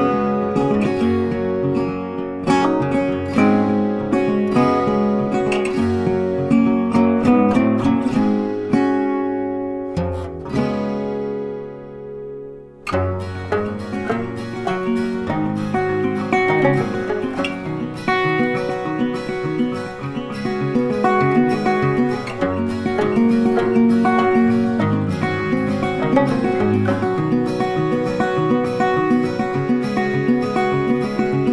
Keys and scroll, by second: 21.1 Delete, 22.8 ctrl+d, 30.6 Delete.